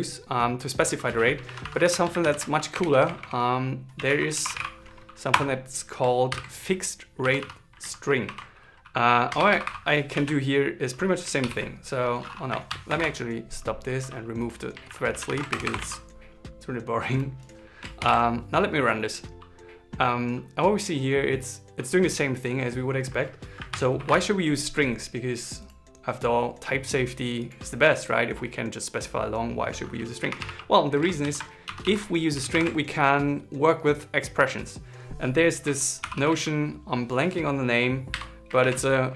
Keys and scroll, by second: 3.7 shift+s, 6.0 shift+9, 8.0 shift+2, 10.8 super+s, 11.1 ctrl+shift+r, 15.5 super+s, 17.7 ctrl+shift+r, 30.9 super+Right, 35.7 shift+p, 36.8 shift+t, 38.3 shift+s.